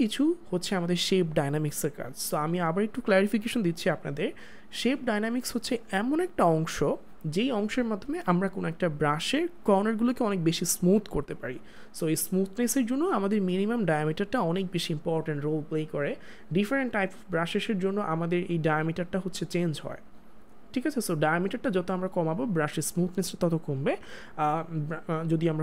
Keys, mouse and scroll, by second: 16.9 click, 19.7 click, 25.0 click.